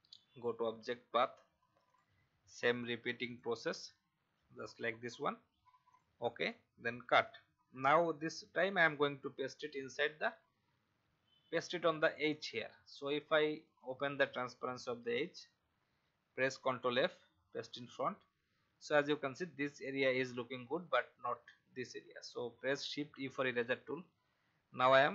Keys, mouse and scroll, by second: 7.0 ctrl+x, 8.9 click, 10.4 scroll up 1, 13.5 click, 16.9 ctrl+f, 18.9 alt+scroll up 1, 23.0 shift+e, 23.9 alt+scroll up 1.